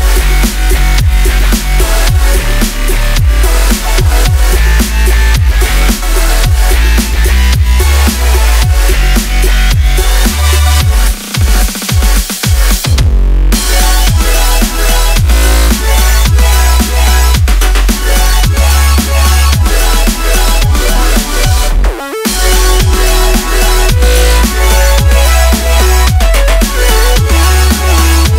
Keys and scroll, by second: 0.1 s, 0.5 Tab, 1.3 c, 2.8 c, 4.1 c, 5.0 c, 6.2 c, 7.5-11.1 typing, 13.6 a, 15.2 Tab, 16.7 a, 19.7 s, 20.9-22.3 typing, 22.7 shift+Tab, 27.3 i.